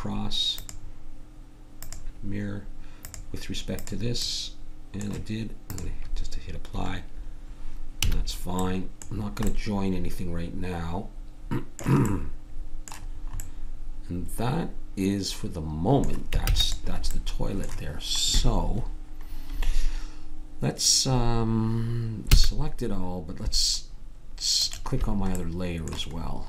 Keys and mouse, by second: 0.8-3.0 drag, 4.2 middle click, 4.8-8.0 drag, 8.0 a, 8.6 click, 12.0-15.4 middle drag, 16.4 ctrl+s, 22.3 a, 25.6 click.